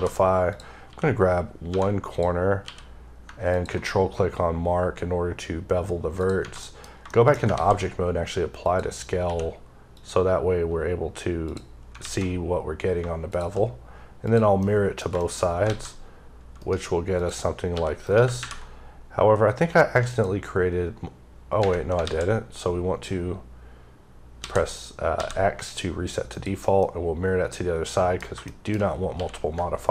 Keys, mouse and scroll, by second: 0.4 click, 0.7 q, 2.0 click, 2.5 q, 3.4 ctrl+click, 4.6-6.1 scroll up 8, 6.1 click, 6.5 middle click, 6.7 scroll down 1, 7.4 a, 8.5 click, 9.1 q, 9.8 click, 10.5-11.3 scroll up 6, 11.3 click, 11.6 scroll down 1, 11.9 x, 13.2 click, 14.5 middle click, 14.8 scroll down 1, 15.1 middle click, 15.6 a, 16.5 right click, 17.1 click, 17.6 g, 17.9 right click, 20.0 click, 26.2 click, 26.7 middle click, 28.7-29.0 shift+scroll up 2, 29.0 q.